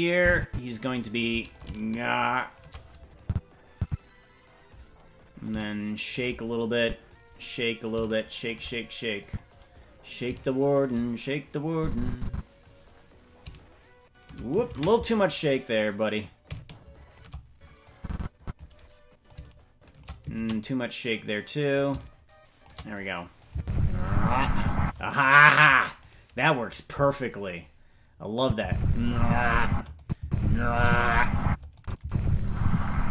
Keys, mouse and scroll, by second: 1.5-2.6 shift+drag, 3.2-4.8 drag, 5.4 click, 6.8 click, 7.8 click, 9.2 click, 10.2 click, 11.7 click, 13.4-14.4 shift+drag, 15.1 ctrl+z, 16.2-17.2 drag, 17.9 click, 19.3 click, 20.8 ctrl+z, 21.7 click, 23.5 click, 23.6 space, 24.8 space, 26.0-28.4 right drag, 28.4 click, 28.6 space, 29.7 space, 30.0 click, 30.2 space, 31.4 space, 31.8 click, 32.0 space.